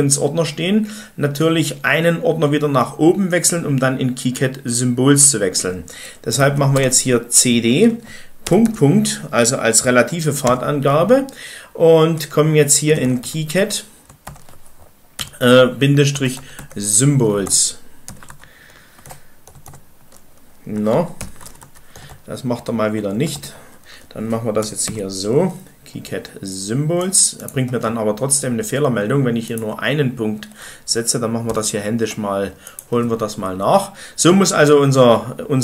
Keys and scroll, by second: 6.0-6.8 typing, 8.1-8.8 typing, 10.3 typing, 12.5-14.6 typing, 15.8-18.1 typing, 18.3 Tab, 19.0 Num_Lock, 19.2-22.1 typing, 21.4 Tab, 21.6 Tab, 31.4 ..